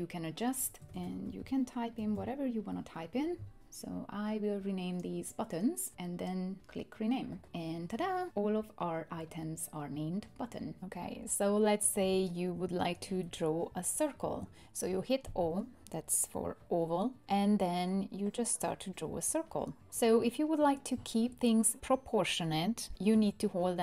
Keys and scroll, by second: 0.9-2.6 typing, 14.2 o.